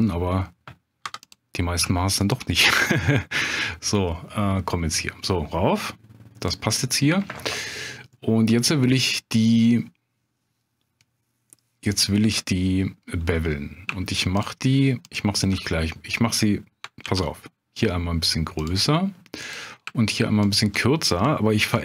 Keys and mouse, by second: 1.0 2, 1.2 click, 2.2 shift+click, 2.6 middle click, 3.6-6.5 drag, 6.8 middle click, 8.1 middle click, 14.4 shift+click, 15.1 shift+click, 17.0 ctrl+b, 18.6 click, 19.4 click, 20.4 shift+click, 21.6 ctrl+b.